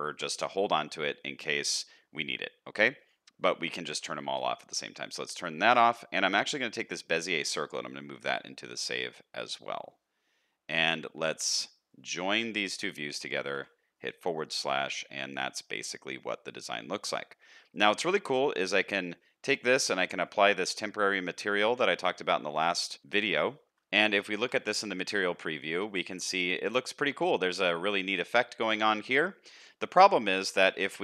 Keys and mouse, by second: 14.7 alt+a, 14.9 middle click, 16.1 middle click, 17.7-21.5 drag, 21.5 alt+middle click, 21.8 alt+a, 22.4 z, 23.8 z, 25.1 alt+a, 25.3 middle click, 26.1 middle drag, 27.0 middle click, 27.7-29.3 middle drag, 30.8-31.0 middle drag.